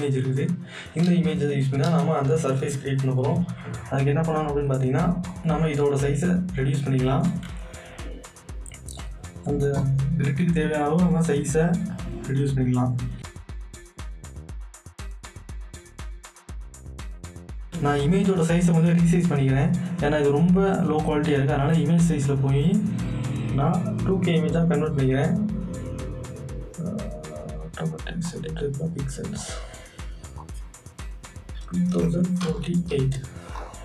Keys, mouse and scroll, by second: 1.1 Return, 4.3 click, 4.4 click, 7.3-10.2 shift+drag, 10.2 scroll up 2, 11.3 scroll down 1, 12.0-12.7 alt+scroll up 1, 13.2 alt+scroll up 2, 13.4-15.2 drag, 15.2 alt+scroll up 1, 15.4 Return, 15.5 click, 15.7 Return, 16.0 alt+scroll up 1, 16.2 scroll down 1, 17.1 click, 22.3 click, 22.3 click, 28.3 click, 28.3 click, 33.5 click, 33.5 click.